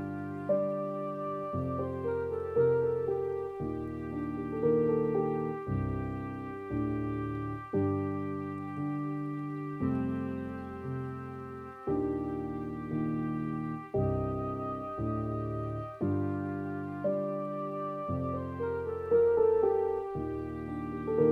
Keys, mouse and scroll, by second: 6.7-13.9 drag, 13.9 scroll down 1, 13.9-21.3 middle drag.